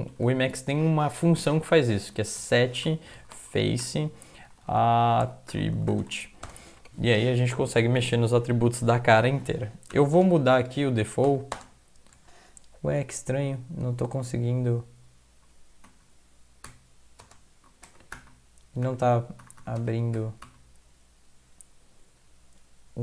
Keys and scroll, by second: 0.7 Left, 1.9-6.9 typing, 10.1 space, 17.3 space.